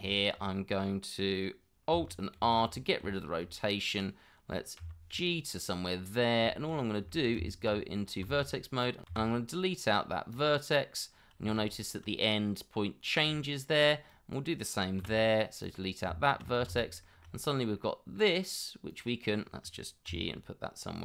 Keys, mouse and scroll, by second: 0.1 shift+middle click, 2.4 alt+r, 3.1 shift+middle click, 4.8 g, 6.5 shift+middle click, 6.7 scroll up 1, 7.1 shift+middle click, 7.4 Tab, 8.0 scroll up 1, 8.3 shift+z, 9.1 x, 12.8 scroll down 1, 13.3 shift+middle click, 15.0 x, 16.1 Tab, 16.7 shift+z, 17.0 shift+middle click, 17.5 scroll up 1, 17.8 middle click, 20.1 g.